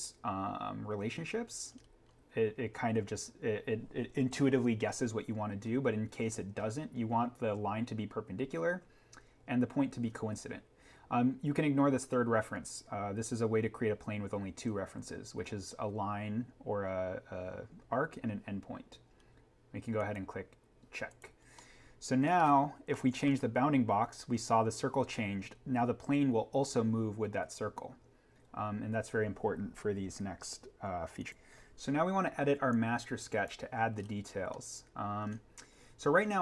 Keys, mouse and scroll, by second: 1.7-3.5 scroll up 1, 5.2-7.0 scroll down 1, 19.9 click, 21.4 scroll up 1, 21.7 scroll, 22.8 middle click, 25.4 scroll, 31.1 click, 33.9-34.3 scroll up 1, 34.5 middle click, 34.7 scroll.